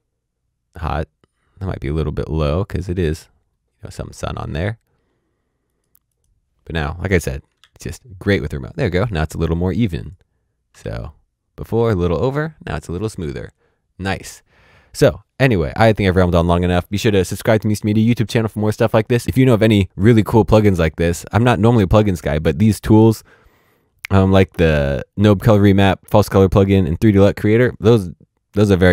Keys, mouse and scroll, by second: 1.4-3.7 scroll up 1, 5.6 click, 7.5 ctrl+d, 10.0 click, 10.7 ctrl+d, 11.7 ctrl+d.